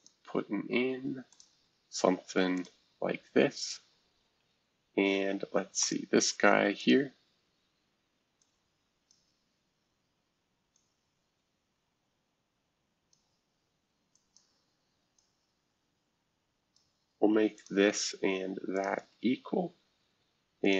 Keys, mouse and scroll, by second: 0.0 click, 1.3 click, 2.5-3.7 drag, 4.2 Escape, 5.8 click, 6.8 click, 8.4 click, 10.7-13.1 drag, 14.1 click, 15.2-16.8 drag, 17.5 click, 18.7 shift+click, 20.6 click.